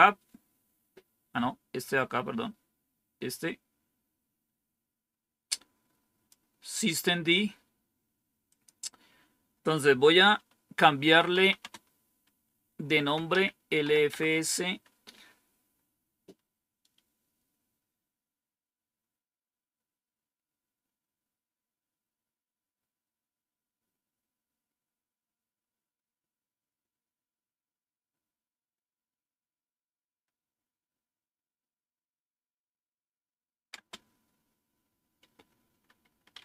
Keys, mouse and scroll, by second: 3.2-6.2 drag, 8.4 click, 10.9-11.5 typing, 12.8-13.8 typing, 14.0 Tab, 33.6 space, 36.0-36.4 typing.